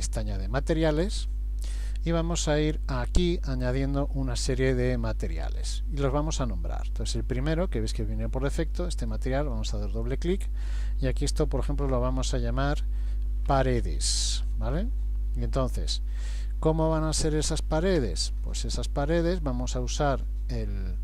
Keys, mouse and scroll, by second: 4.8 click, 8.7 click, 19.6 scroll down 1, 20.2-21.0 scroll down 1.